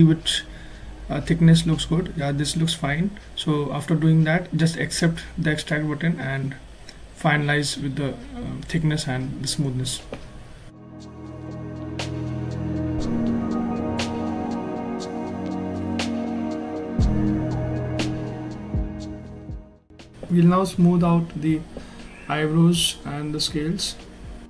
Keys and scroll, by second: 0.9-1.8 typing, 2.1 Return, 14.5 ctrl+z, 18.9 s, 21.0 ctrl+shift+z.